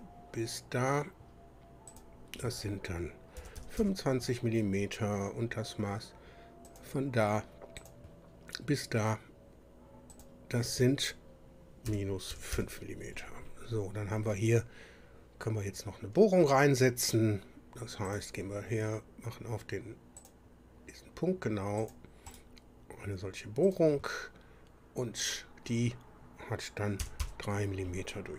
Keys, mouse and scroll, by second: 1.9 click, 3.4 KP_2, 3.6 KP_5, 3.8 KP_Enter, 6.7 click, 7.8 click, 10.1 click, 11.9 KP_Subtract, 12.3 KP_5, 12.5 KP_Enter, 18.1 click, 20.2 click, 21.8 click, 22.3 right click, 23.7 click, 25.2 click, 27.0 KP_3, 27.2 KP_Enter.